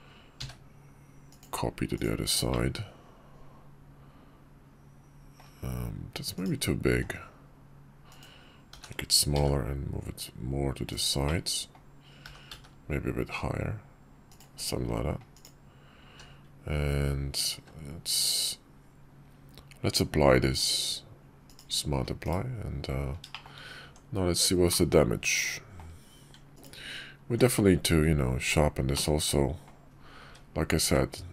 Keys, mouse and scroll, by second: 1.1-1.8 drag, 2.2-5.1 middle drag, 6.1 click, 6.6 s, 8.4 g, 11.1 middle click, 12.0 g, 15.8 q, 17.3 q, 21.7 middle drag, 22.0 /, 23.0 shift+middle click, 23.6 Tab, 24.4-25.5 drag, 28.6 click, 30.0 `, 30.5 `, 31.1 `.